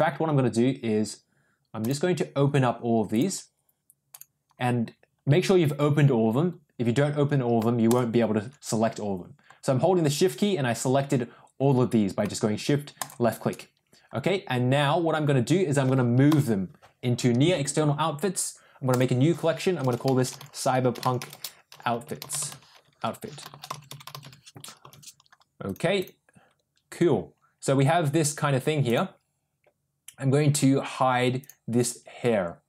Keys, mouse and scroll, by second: 1.7 click, 3.0 click, 4.0 click, 7.8 shift+click, 12.9 shift+click, 16.2 m.